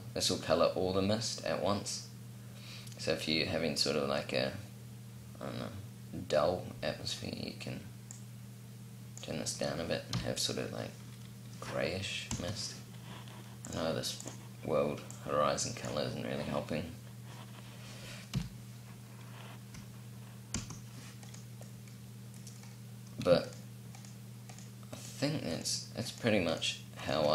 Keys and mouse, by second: 7.8-9.8 drag, 9.8 p, 12.0 p, 17.9 p, 20.2 p, 20.8 right click, 21.2-22.3 drag, 22.7-25.5 drag.